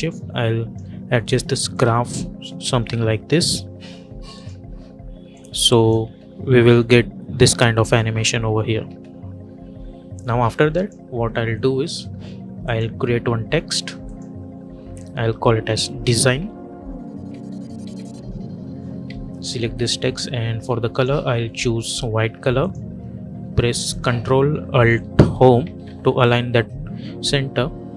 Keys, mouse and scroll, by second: 1.6-5.9 drag, 5.9 space, 8.7 space, 10.0 j, 10.6 click, 15.1-18.2 typing, 18.9 ctrl+a, 20.8 click, 25.5 ctrl+alt+Home.